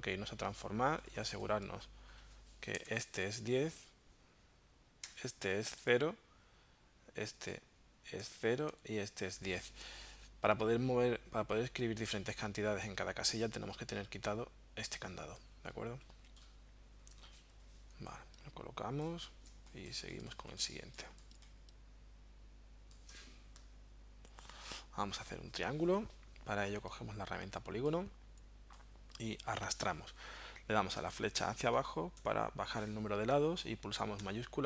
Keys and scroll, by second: 17.6 v, 19.5 space, 31.0 Down, 31.8 Down.